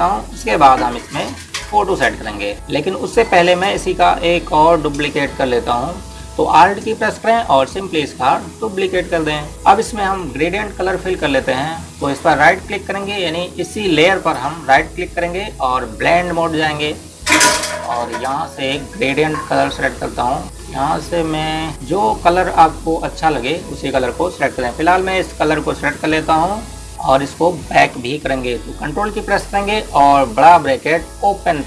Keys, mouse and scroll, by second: 0.0 click, 2.5 click, 9.0 click, 19.1 click, 26.8 click.